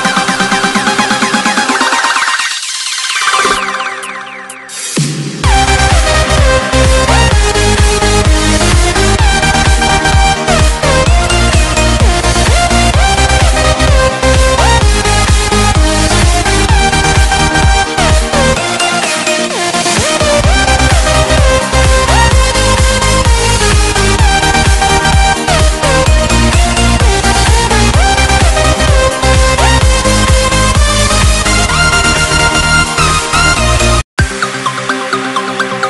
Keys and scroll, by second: 22.8 ctrl+z.